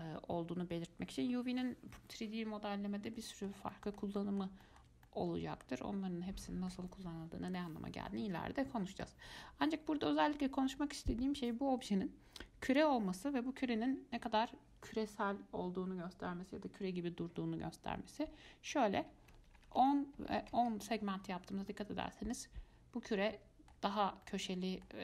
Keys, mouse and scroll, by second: 3.3-3.7 middle drag, 3.7 scroll down 1, 3.9-7.4 shift+middle drag, 7.4-7.8 scroll down 1, 7.8-10.8 middle drag, 12.9-15.9 drag, 21.9-24.2 middle drag, 24.2 scroll up 2, 24.5-25.0 middle drag.